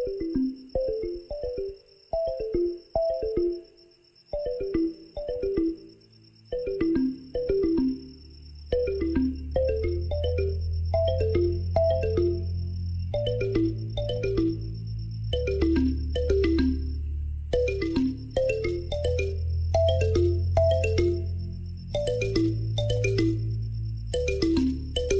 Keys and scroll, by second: 0.5 g, 0.7 x, 2.3 2, 2.4 0, 2.5 Return, 3.3 2, 3.4 5, 3.5 Return, 8.4-9.8 typing, 9.9 Return, 11.4 g, 11.5 x, 12.6-14.5 typing, 16.4 shift+z, 20.9 g, 21.3 y, 22.2 shift+z.